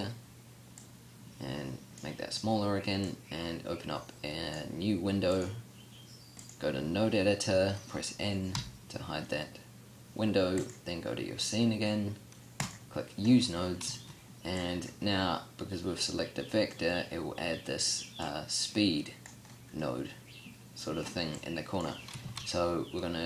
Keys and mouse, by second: 8.5 n, 22.2 shift+a.